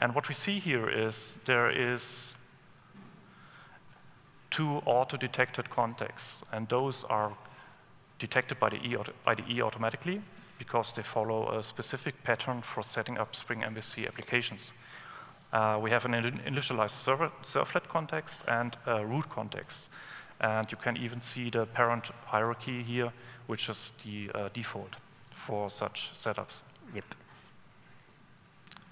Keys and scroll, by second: 28.0 super+1.